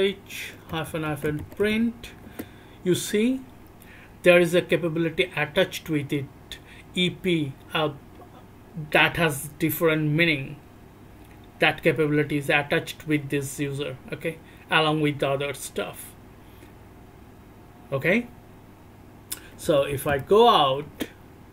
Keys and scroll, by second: 0.7 c, 0.8 c, 1.2 c, 2.2 Return, 2.2 c, 19.6 e, 19.9 e, 20.2 e, 20.8 Return.